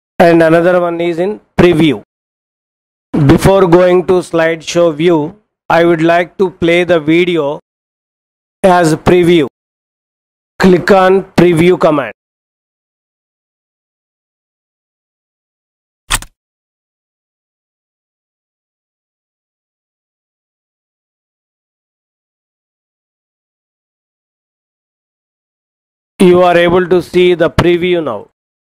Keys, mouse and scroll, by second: 16.0 click.